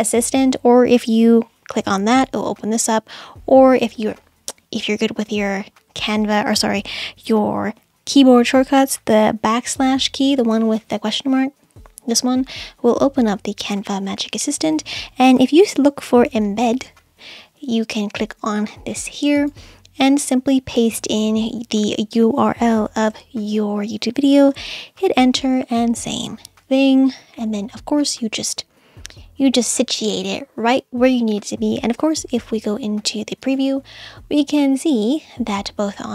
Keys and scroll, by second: 11.7 /, 15.5-17.2 typing, 23.1 super+v, 24.6 Return, 32.0 BackSpace.